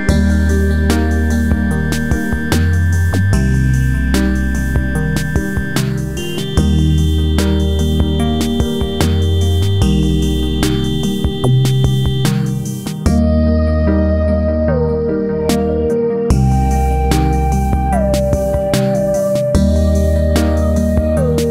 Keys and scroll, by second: 0.9 ctrl+a, 4.9 Delete, 13.9 ctrl+a.